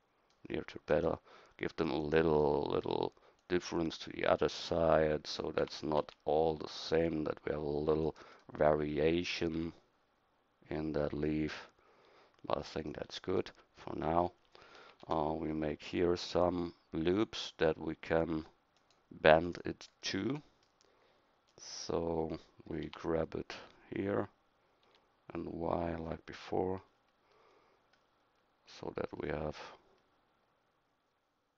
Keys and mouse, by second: 3.4-4.6 middle drag, 5.6 g, 14.9 ctrl+r, 22.9 g.